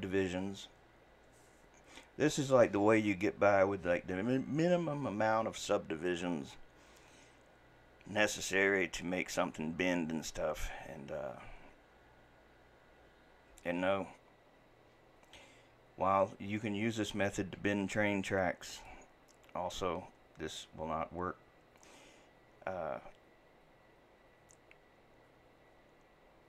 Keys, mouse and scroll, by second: 18.8 click.